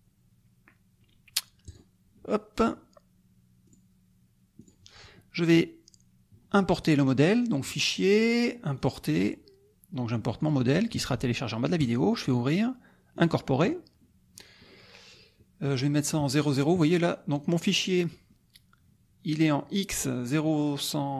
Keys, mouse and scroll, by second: 1.6 click, 3.6 click, 4.7 click, 7.6 click, 8.7 click, 10.4 click, 11.8 click, 13.1 click, 15.6 middle click, 17.0 click, 17.5 click.